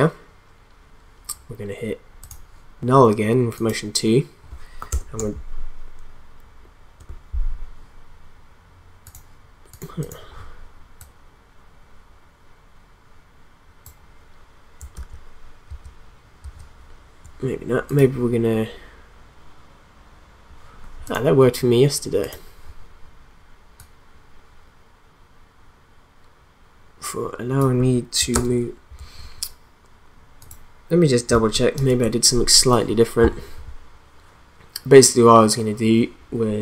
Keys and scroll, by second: 4.9 Return, 14.9 ctrl+z, 28.3 ctrl+z, 29.0 ctrl+z, 31.7 ctrl+s.